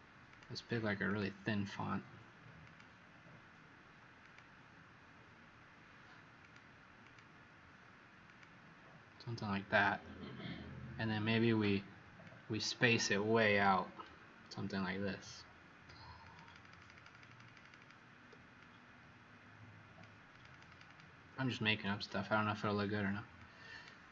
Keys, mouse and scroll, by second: 0.3 click, 1.0 click, 7.0 click, 8.2 click, 16.4 click, 16.7 click, 16.9 click, 17.2 click, 17.4 click, 17.6 click, 17.7 click, 18.5 click, 20.8 click, 23.3 click.